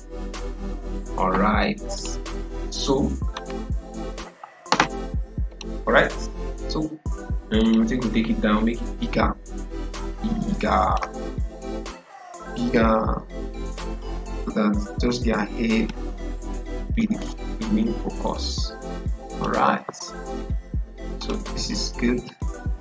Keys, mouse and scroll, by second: 5.4-20.3 drag.